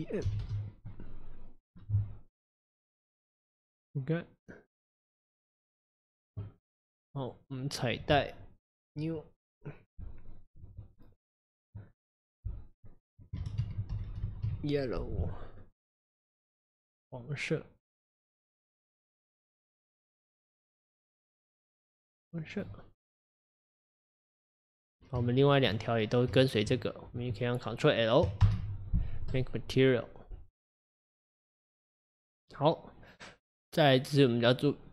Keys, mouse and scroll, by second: 1.7 click, 7.2 click, 8.9-12.8 drag, 14.1 l, 16.3 click, 23.7 click, 25.4 shift+click, 26.5 shift+click, 28.4 ctrl+l, 30.9 click.